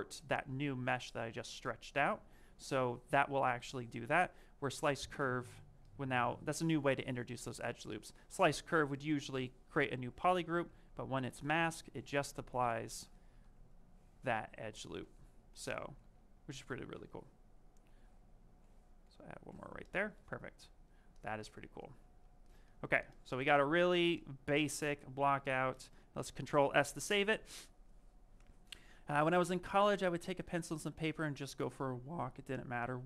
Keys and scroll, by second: 13.0 ctrl+z, 14.5 ctrl+shift+space, 17.7 ctrl+shift+space, 26.1 s.